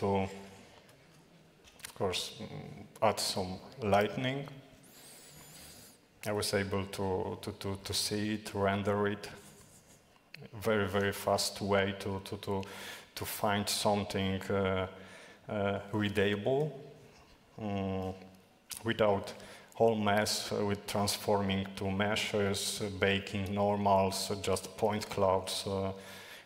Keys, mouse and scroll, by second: 0.0-2.1 typing, 5.2 middle click, 6.1 shift+`, 6.5 w, 7.2 shift+space, 8.3 s, 8.6 s, 8.6 d, 11.4 d, 11.4-11.9 w.